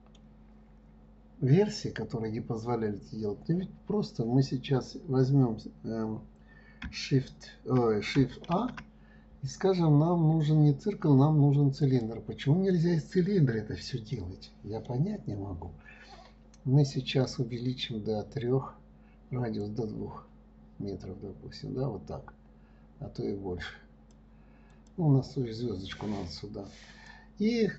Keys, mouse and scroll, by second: 1.8-4.5 scroll up 1, 8.9 shift+a, 13.1-15.7 middle drag, 15.7-18.7 scroll down 1, 20.0-23.0 drag, 25.1-27.4 drag.